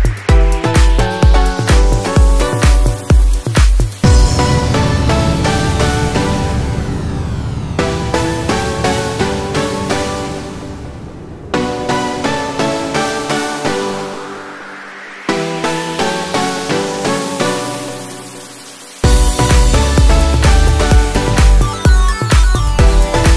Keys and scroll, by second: 3.4 ctrl+t, 22.2 ctrl+t.